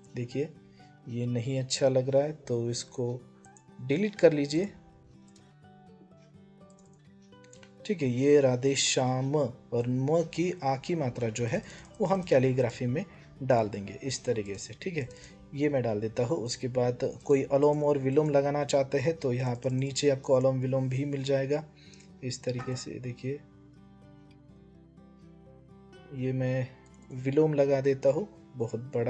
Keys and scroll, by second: 5.0 BackSpace.